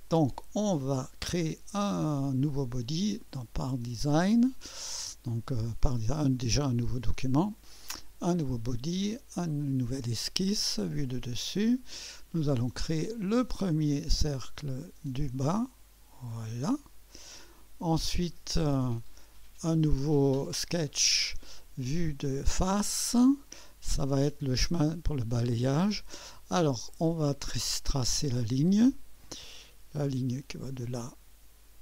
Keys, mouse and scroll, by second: 0.0 click, 2.8 click, 3.6 click, 6.6 click, 8.0 click, 9.3 click, 10.8-12.0 drag, 13.2 click, 15.0 click, 16.3 click, 17.5 click, 19.1 click, 20.9 click, 21.7 click, 22.2 click, 23.5-24.5 drag, 24.8-28.1 right drag, 24.9 middle click, 28.1 click, 30.3 click, 30.7 click.